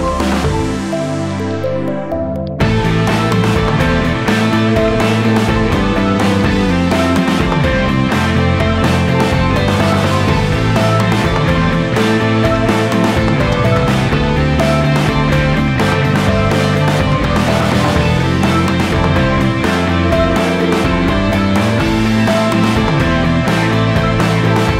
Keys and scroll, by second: 0.0-1.2 typing, 2.1 ctrl+], 3.1 ctrl+g, 3.5 ctrl+c, 13.0 space, 14.6 space, 15.0 space, 18.5-21.4 typing, 21.1 ctrl+z, 21.8 ctrl+z, 23.8 a, 24.6 p.